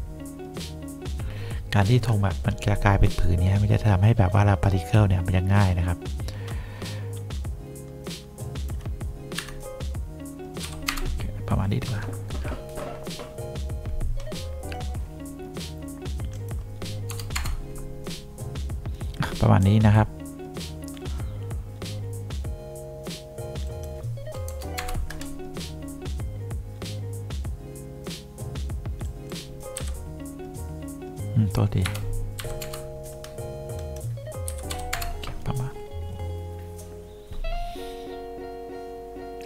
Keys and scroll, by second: 9.5 KP_Subtract, 10.8 5, 11.0 Return, 17.2 0, 17.5 Return, 24.6 0, 24.9 Return, 32.0 BackSpace, 32.5 3, 32.7 Return, 34.6 Delete, 34.8 2, 35.1 Return.